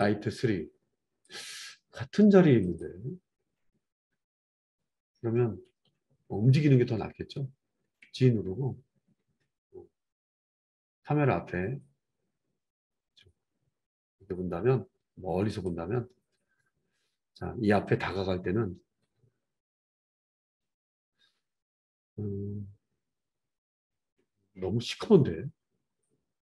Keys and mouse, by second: 0.0-1.4 middle drag, 1.4 click, 1.5-2.6 middle drag, 2.6 click, 2.8-17.9 middle drag, 8.1 g, 17.9-26.4 drag.